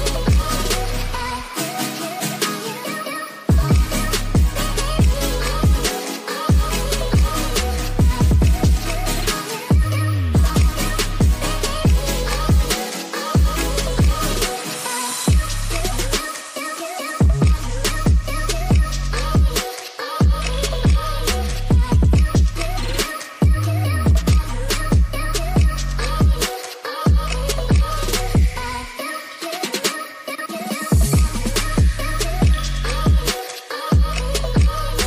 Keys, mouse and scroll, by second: 2.8 middle click, 5.9-7.0 drag, 7.4-8.0 middle drag, 8.6-9.8 drag, 10.7-11.9 drag, 12.3 click, 14.4 click, 15.1-16.4 drag, 16.5 click, 17.4 ctrl+s, 19.6 click, 20.4 click, 21.3 click, 21.8 middle click, 24.0-24.4 middle drag, 25.5 shift+a, 31.6-33.6 drag, 34.9 click.